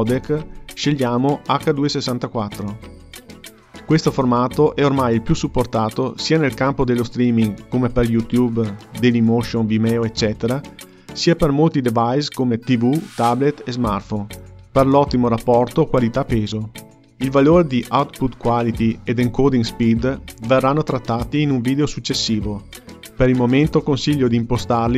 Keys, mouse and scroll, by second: 1.9-5.0 drag.